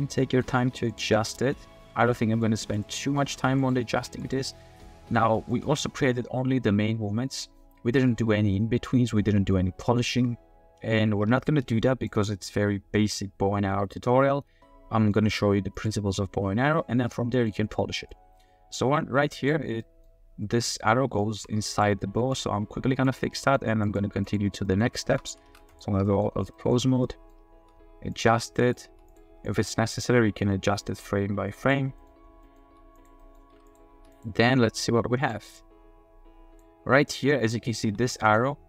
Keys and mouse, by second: 0.2 middle click, 0.5 g, 1.1-2.4 middle drag, 2.6 g, 3.0 middle click, 3.3 g, 4.0 r, 4.1 r, 5.5-6.4 drag, 6.4-12.1 middle drag, 13.1-15.1 middle drag, 15.8 click, 17.1-17.5 middle drag, 18.1-19.5 drag, 19.8 middle drag, 21.2 shift+drag, 23.0 click, 23.4 click, 23.8 click, 24.3 click, 24.7 click, 24.8 shift+middle click, 25.0 shift+drag, 25.1 shift+middle click, 25.5 ctrl+Tab, 25.7 click, 26.0 drag, 26.5 click, 27.0 click, 27.6-29.2 typing, 28.1 click, 29.7 middle drag, 29.9 click, 30.8-31.7 drag, 32.4 click, 32.6 r, 33.2 drag, 33.5 g, 33.9 r, 35.6-36.6 drag, 37.2 click, 37.8 g.